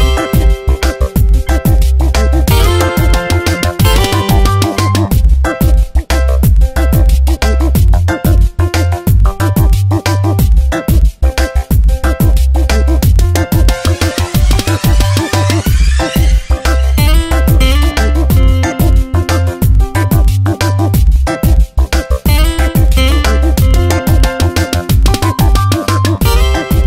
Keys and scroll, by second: 3.7 space, 4.5 v, 6.7 ctrl+d, 12.5 ctrl+shift+i, 13.3 Delete, 15.8 ctrl+z, 17.7 ctrl+z, 19.4 ctrl+z, 20.8 e, 21.9 ctrl+z, 22.9 ctrl+shift+i, 24.3 ctrl+d, 24.6 v, 25.9 Tab.